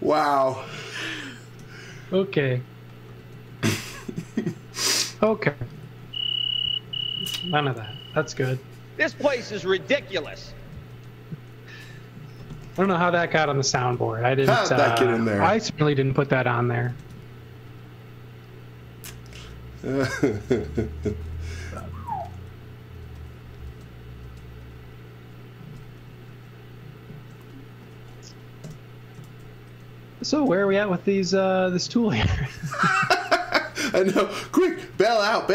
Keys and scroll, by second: 1.6 r, 3.1 space, 3.4 x, 3.7 v, 5.8 z, 6.3 z, 6.8 x, 7.9 z, 9.4-10.8 typing, 12.7 shift+3, 13.1 z, 13.7 x, 14.9 c, 16.7 space, 16.9 c, 19.4 space, 20.4-24.3 typing, 26.3 shift+3, 29.3 shift+3, 30.5 l, 34.4 space, 34.8 x.